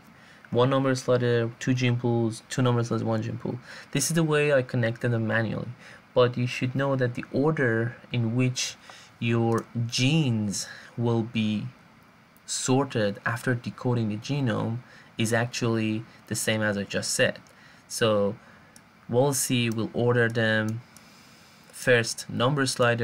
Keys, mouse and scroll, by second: 22.9 click.